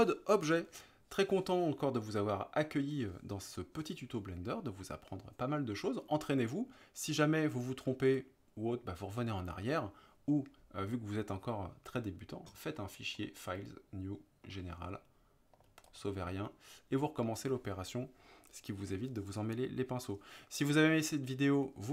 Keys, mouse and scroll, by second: 13.3-16.0 drag, 17.0 middle click.